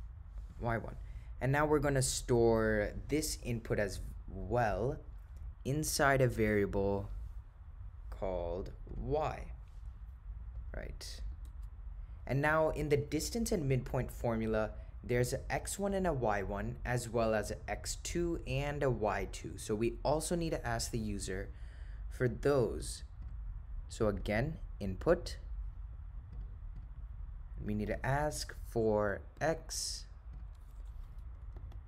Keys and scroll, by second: 3.9 ,, 8.9 1, 11.4 Return, 24.3 Right, 30.4 0, 31.5-31.8 typing.